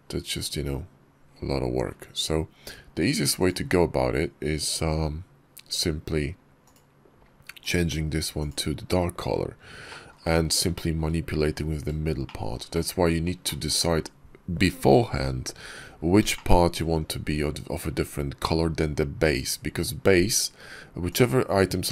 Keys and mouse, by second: 3.2 click, 6.5 click, 7.4 click, 9.7 shift+drag, 10.6 shift+drag, 12.1 shift+drag, 12.6 click, 13.3 shift+click, 16.2-16.6 shift+drag, 20.9 click, 21.8 click.